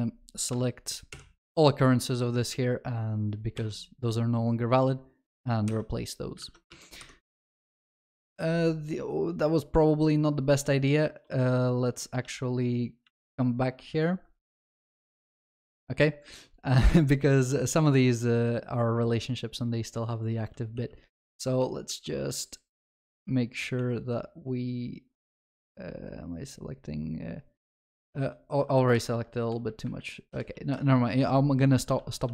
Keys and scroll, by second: 1.1 ctrl+alt+shift+j, 3.6 ctrl+v, 5.6 Escape, 6.4 ctrl+alt+shift+l, 6.7 ctrl+s, 12.2 ctrl+z, 20.8 alt+j, 28.2 alt+j, 28.9 Escape, 32.0 ctrl+z.